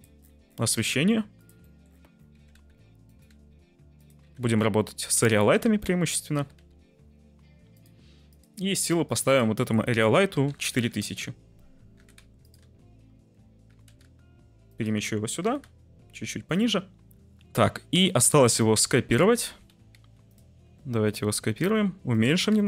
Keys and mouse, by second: 0.7 g, 0.9 z, 1.3 click, 1.7 middle click, 2.3-4.4 typing, 3.0 click, 5.0 click, 5.4 middle click, 5.6 g, 5.8 z, 6.3 g, 6.5 y, 8.2 click, 9.3-11.0 drag, 10.6 0, 10.8 0, 11.9 g, 12.1 z, 12.4 click, 12.6 `, 13.6 g, 13.8 x, 14.6 click, 15.4 g, 15.6 z, 16.5 click, 18.0 middle click, 19.0 shift+d, 19.1 x, 19.7 y, 21.5-22.6 typing.